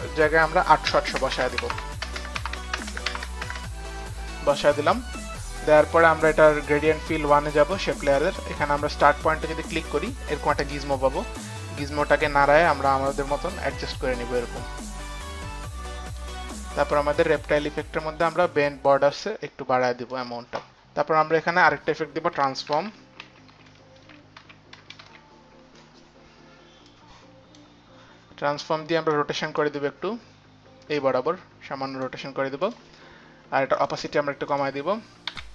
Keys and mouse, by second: 0.0-4.8 typing, 0.9 click, 1.7 Tab, 1.7 click, 1.8 Tab, 1.8 click, 2.4 Tab, 3.1 Tab, 3.1 click, 3.5 Tab, 4.8 Tab, 4.8 click, 6.3 Tab, 6.3 click, 6.3 KP_8, 9.0 click, 10.9 click, 13.2 click, 13.6 click, 15.1 click, 18.3 click, 19.6 click, 21.3 click, 22.3-25.5 typing, 22.4 click, 22.5 click, 24.8 click, 26.9 click, 29.6 click, 32.6 click, 33.6 click, 34.5 click, 35.3 click, 35.3 t.